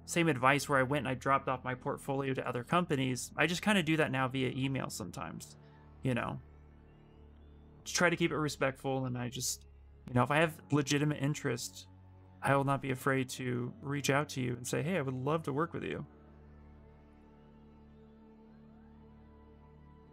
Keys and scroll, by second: 8.3-10.7 typing, 12.2 s.